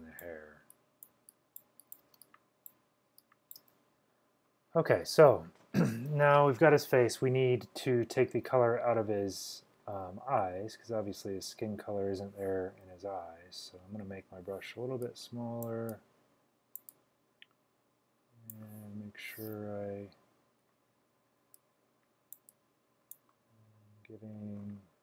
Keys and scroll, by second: 2.2-3.6 typing, 5.8 typing, 12.9-14.2 typing.